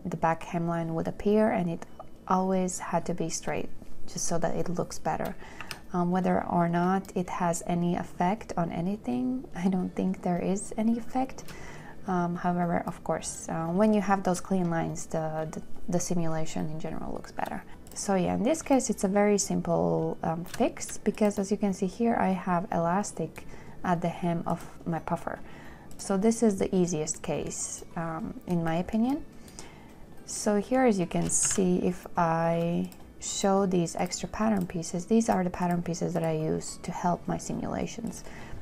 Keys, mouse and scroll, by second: 5.9 2, 7.4 shift+click, 31.8 shift+w, 35.8 w.